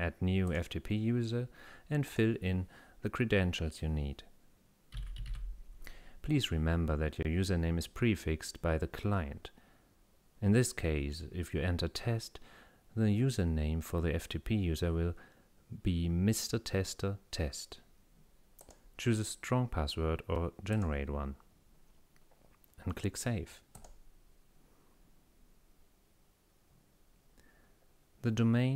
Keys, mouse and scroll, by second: 0.5 click, 2.1 click, 4.7-5.8 typing, 18.6 click, 20.8 click, 23.8 click.